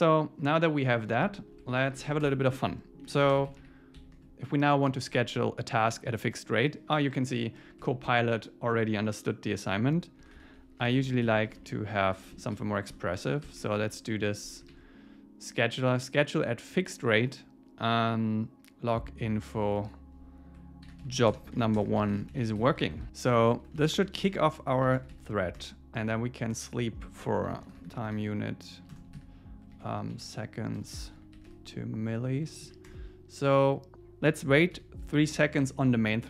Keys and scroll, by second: 1.9 shift+super+Left, 7.8 Tab, 12.9 Return, 15.7 super+s, 23.1 Return, 25.5 Return, 28.9 Return, 30.8 Return, 32.6 Down, 32.9 Return, 35.2 super+Right.